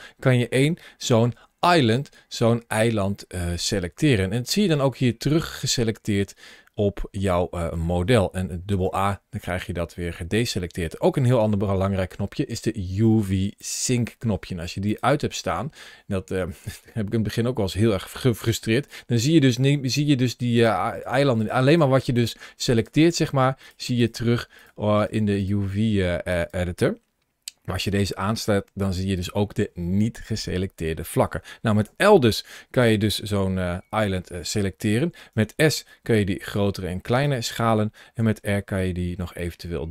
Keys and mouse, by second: 2.3-3.4 middle drag, 4.3-7.6 middle drag, 8.5 a, 8.7 a, 11.8 ctrl+shift+a, 19.7 click, 20.8 click, 21.5 click, 21.9 click, 23.0 click, 23.8 click, 25.2 click, 31.7 l, 35.1 s, 37.0 right click, 38.0 r.